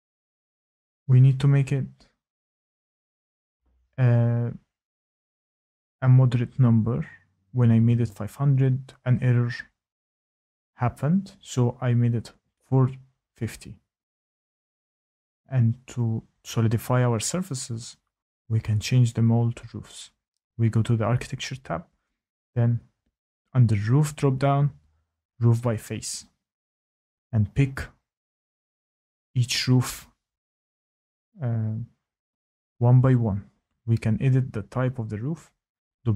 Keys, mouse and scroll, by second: 0.5 click, 1.1 click, 1.2 ctrl+z, 1.2 click, 1.3 click, 3.1 click, 4.2-4.7 typing, 6.8 click, 7.2 click, 14.2 click, 23.2 click, 26.1 click, 28.8 click, 30.2 click, 32.8 click, 33.4 click, 35.1 click.